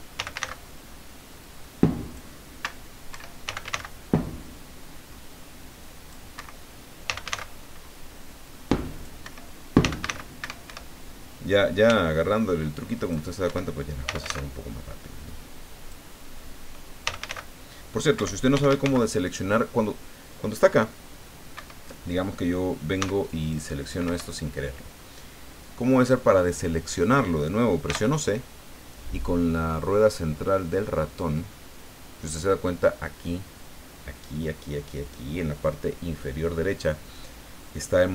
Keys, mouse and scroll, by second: 0.1 f, 0.3 a, 0.4 c, 1.4 click, 3.1 Escape, 3.4 f, 3.6 a, 3.7 c, 5.3-6.3 drag, 6.3 Escape, 7.1 f, 7.3 a, 8.4 click, 9.2 Escape, 9.8 f, 10.0 a, 10.4 Escape, 11.9 c, 12.2-13.3 drag, 13.4 Escape, 14.0 f, 14.2 a, 15.3 click, 16.2 middle click, 17.0 f, 17.2 a, 17.3 c, 18.2 Escape, 18.5 f, 18.7 a, 18.8 c, 21.5 Escape, 23.0 c, 23.3 click, 24.0 Escape, 27.8 c, 29.9-33.0 middle drag, 35.1 click.